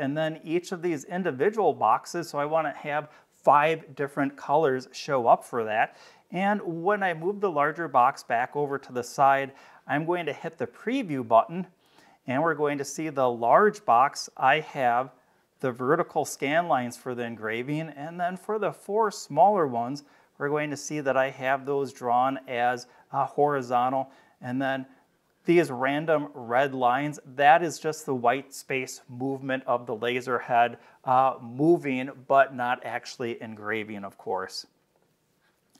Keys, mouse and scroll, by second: 4.9 click, 6.3-8.8 drag, 11.1 click, 13.5 scroll up 2, 14.2-14.5 scroll up 2, 16.4-17.4 scroll down 6, 18.0 middle click, 18.0 scroll down 1, 18.6-20.0 scroll up 8, 26.8-27.7 scroll down 4, 34.8 click.